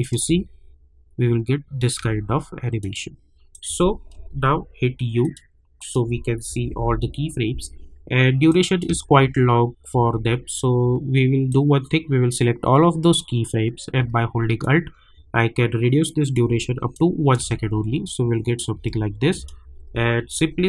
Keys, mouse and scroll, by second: 0.0 click, 0.2 space, 2.8 click, 4.1 u, 5.2 click, 6.4 -, 6.6 -, 6.8 -, 7.0 scroll down 1, 8.5 click, 8.9 space, 11.5-14.6 drag, 14.6-17.3 alt+drag, 17.4 space, 19.3 click, 19.8 u.